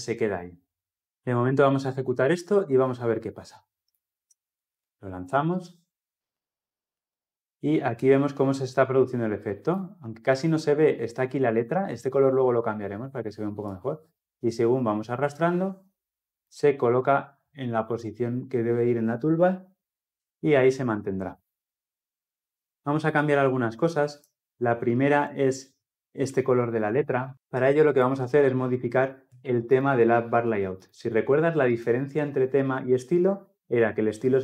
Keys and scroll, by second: 4.5 shift+F10.